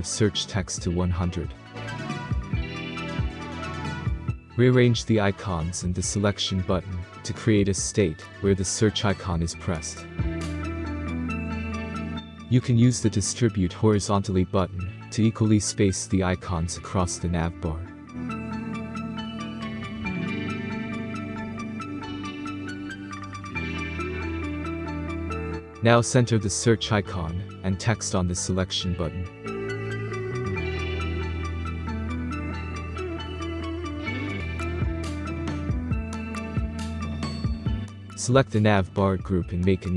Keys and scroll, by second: 27.4 Left, 27.7 Left, 27.9 Left, 28.1 Left, 28.3 Left, 28.4 Left, 28.6 Left, 28.8 Left.